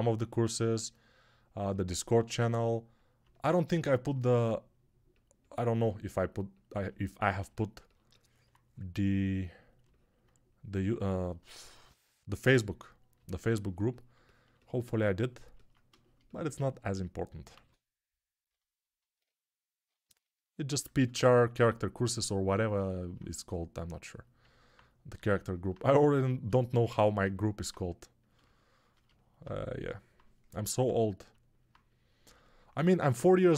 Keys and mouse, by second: 17.5 alt+q, 20.4-26.4 alt+drag, 31.2-33.5 alt+drag.